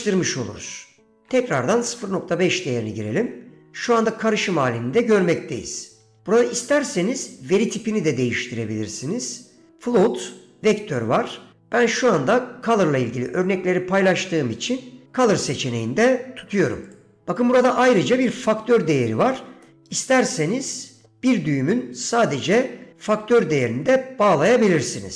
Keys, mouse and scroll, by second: 1.3 click, 8.0-17.1 drag, 19.8-21.2 middle drag.